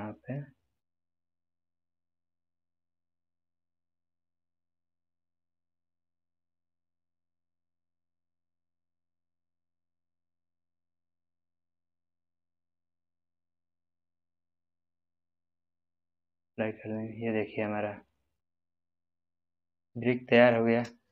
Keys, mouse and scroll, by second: 1.3 g, 15.1 click, 16.1-18.6 middle drag, 18.9 scroll down 1, 19.7-21.1 middle drag.